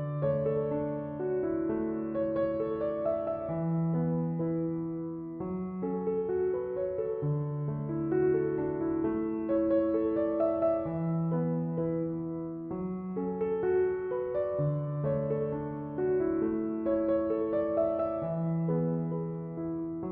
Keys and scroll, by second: 0.9 BackSpace, 11.9 BackSpace.